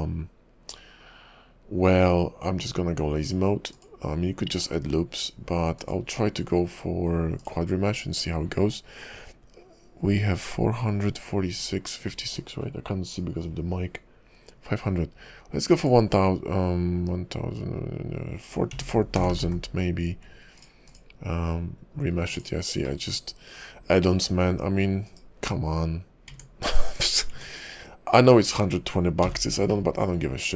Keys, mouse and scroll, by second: 3.2 click, 3.7 click, 5.7 click, 7.4 click, 15.8 click, 19.3 0, 19.4 0, 20.8 click, 22.3 click, 22.8 middle click, 25.0 /, 26.3 Tab, 26.9 /, 27.3 Tab, 29.2 n, 29.7 middle click, 30.1 scroll up 3.